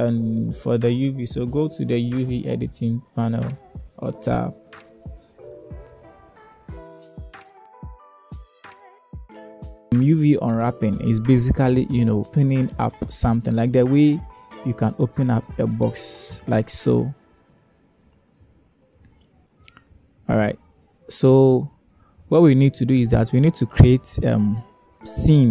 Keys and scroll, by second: 5.4 1.